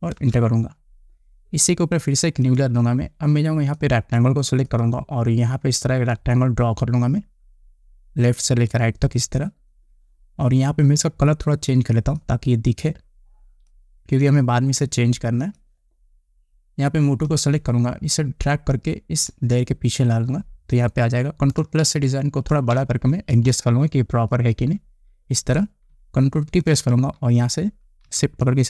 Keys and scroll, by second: 0.7 Return, 22.3 ctrl+=, 23.2 space, 27.0 ctrl+t.